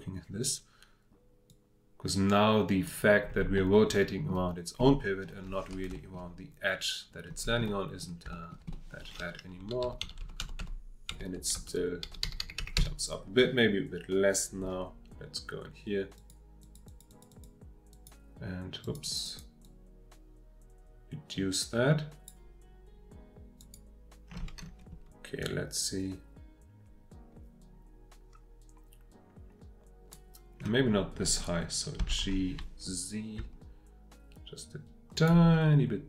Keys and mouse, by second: 3.5-4.3 middle drag, 4.8-5.2 middle drag, 5.9 shift+middle drag, 7.6-8.0 middle drag, 8.3 shift+middle drag, 8.7 middle click, 9.6 Right, 9.8 Right, 10.0 Right, 10.2 Right, 10.4 Right, 10.6 Right, 11.1 Right, 11.6 Right, 12.0 Left, 12.2 Left, 16.6 click, 16.9 click, 17.1 click, 17.3 click, 18.0 click, 18.9 click, 19.0 click, 19.2 click, 19.7-22.3 drag, 23.6 click, 25.8-30.1 drag, 32.0 g, 32.2 z, 35.3-36.0 middle drag.